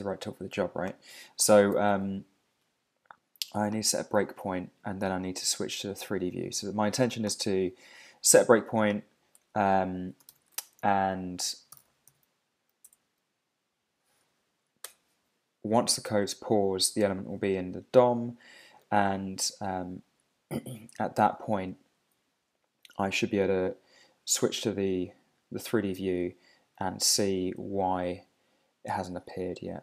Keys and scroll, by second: 1.7 alt+super+i, 10.3 super+o, 14.2 Down, 14.8 Return.